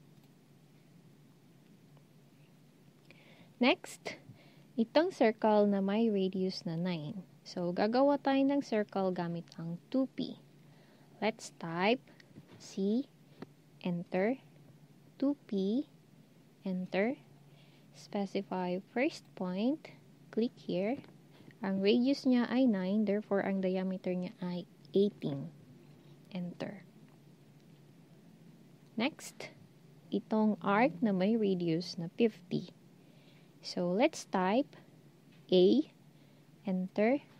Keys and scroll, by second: 12.8 c, 15.0-15.7 typing, 24.7-25.4 typing, 35.4 a.